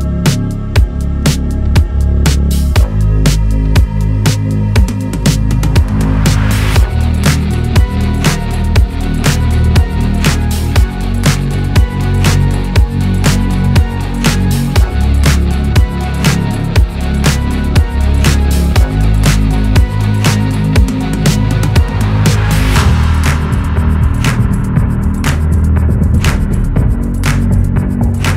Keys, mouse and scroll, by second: 5.7-6.3 alt+scroll down 1, 7.7-8.3 scroll up 2, 9.3-12.3 drag, 14.8-15.3 alt+scroll up 1, 15.5-16.3 scroll up 1, 17.3-18.3 shift+drag, 22.5 i, 23.1 click, 23.9 v, 26.9 v, 27.7 shift+click.